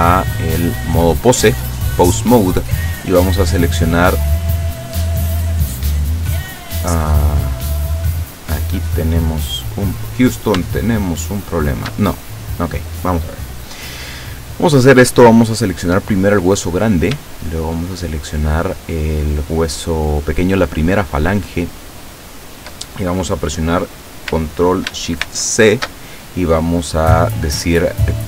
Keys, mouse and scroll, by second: 0.1 click, 1.3 click, 3.5 right click, 4.3 right click, 5.5 right click, 6.2 right click, 8.1 click, 8.9 click, 9.6 right click, 10.8 shift+right click, 12.2 shift+right click, 17.8 shift+right click, 25.3 ctrl+shift+c.